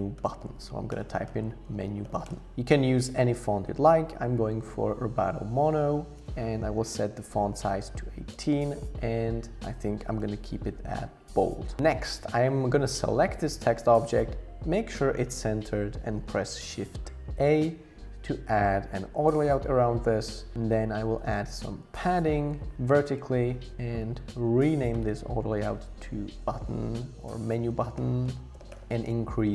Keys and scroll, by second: 0.0-0.4 typing, 6.6 Down, 6.8 Down, 6.9 Down, 7.1 Down, 7.3 Down, 10.7 super+0, 17.3 shift+a, 21.2 Up, 21.4 Up, 21.6 Up, 21.8 Up, 23.1 Return, 24.6 super+r, 26.2-28.5 typing.